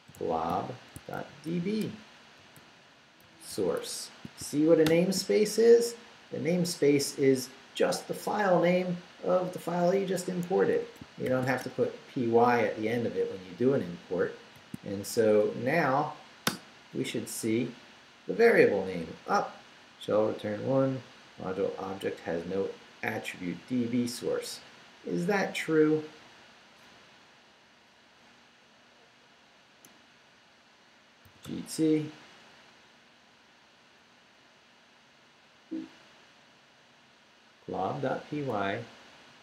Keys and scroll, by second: 0.0-4.9 typing, 10.6 Escape, 11.0-12.0 typing, 14.6 shift+;, 15.0 shift+Up, 16.5 Return, 29.9 Return, 31.0-31.9 typing, 32.8 Left, 34.5 Left, 37.9 Right, 38.7 Left.